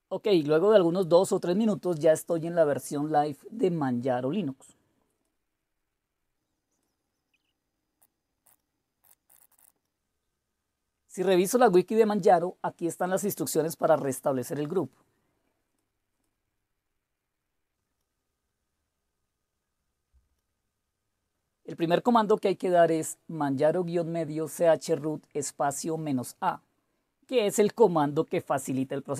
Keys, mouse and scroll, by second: 3.2 click, 6.3 click, 7.1 click, 7.3 click, 7.6 click, 7.7-9.7 typing, 8.2 click, 8.9 click, 9.9 click, 14.9-16.0 scroll down 2, 16.0-17.0 scroll down 1, 17.0-17.9 scroll down 1, 17.9-25.3 scroll down 4, 25.3 click.